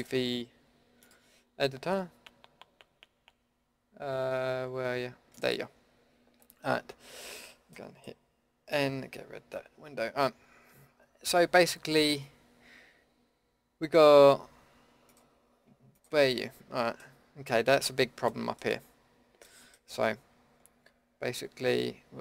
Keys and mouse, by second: 8.7 n, 15.1-20.5 drag.